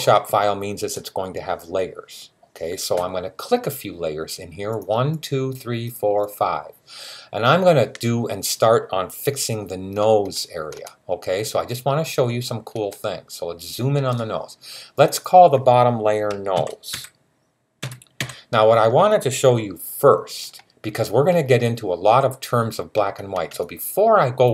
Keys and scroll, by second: 16.4-18.0 typing.